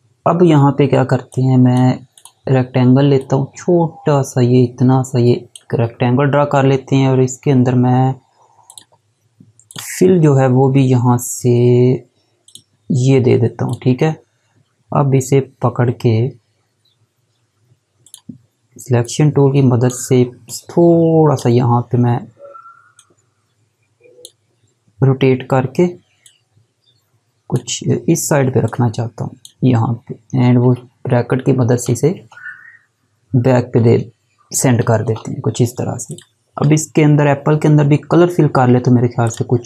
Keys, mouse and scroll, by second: 1.3 click, 8.6 click, 12.5 click, 18.0 click, 36.0 click, 39.2 click.